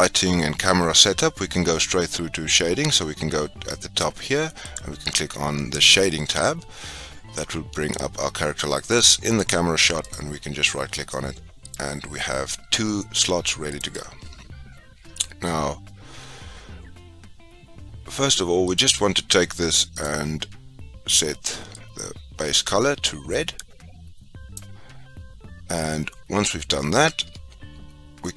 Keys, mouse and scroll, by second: 4.6 click, 10.0 click, 13.6-19.8 drag, 20.4 click.